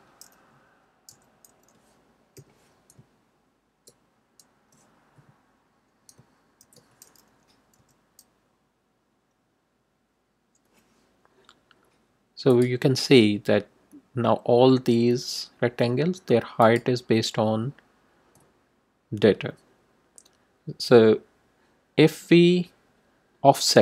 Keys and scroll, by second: 1.1 d, 2.3 =, 7.7 d.